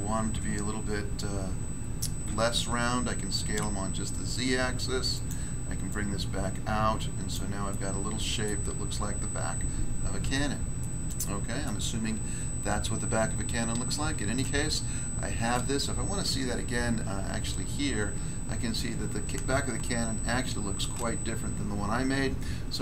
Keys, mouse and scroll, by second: 2.2 s, 3.4 z, 5.1 click, 5.2 click, 5.8 click, 7.3 click, 7.6 middle click, 8.4 middle click, 8.7 scroll down 1, 10.2 Tab, 10.8 middle click, 11.6 middle click, 12.2-12.8 scroll down 1, 12.8-13.7 scroll down 1, 14.3 middle click, 15.5 middle click, 16.5 1, 18.2 scroll up 1, 19.8 shift+middle click.